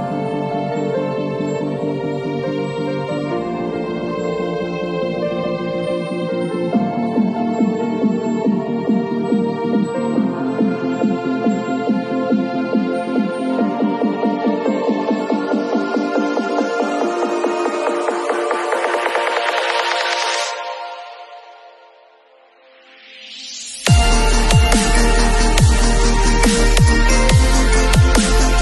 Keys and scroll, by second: 0.0 [, 3.0 ], 6.2 [, 9.2 [, 10.8 [, 12.1 ], 22.9 0, 27.6 ].